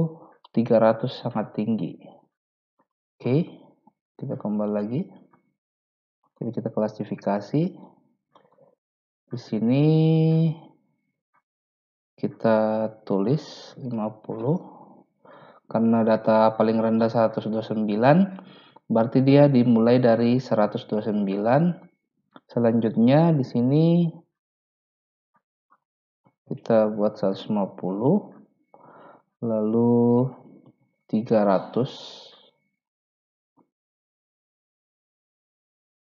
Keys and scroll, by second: 13.5-14.3 typing, 14.4 Return, 26.1-27.5 typing, 30.5-31.5 typing, 31.8 Return.